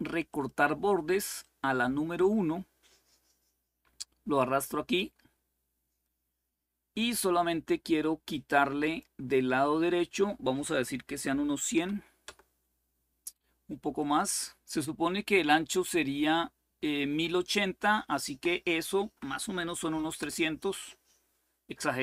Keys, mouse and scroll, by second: 0.0 click, 1.1-5.3 drag, 8.5 click, 11.3-12.0 typing, 13.7 click, 18.0 BackSpace, 18.8 Delete, 19.6 3, 19.9 Return.